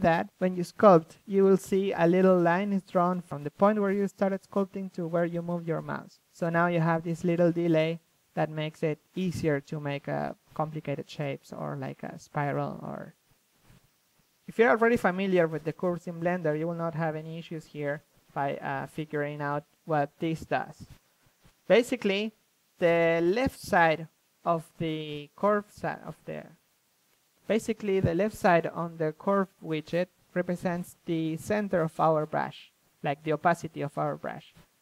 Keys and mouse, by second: 0.8-4.1 drag, 7.3-12.6 drag, 13.0-14.3 drag, 15.8 f, 20.9-21.7 drag, 20.9 f, 22.1-22.7 drag, 22.7 f, 23.6-27.9 drag, 25.7 f, 29.0-30.4 drag, 33.4 click, 33.4 f, 34.5-34.8 right drag.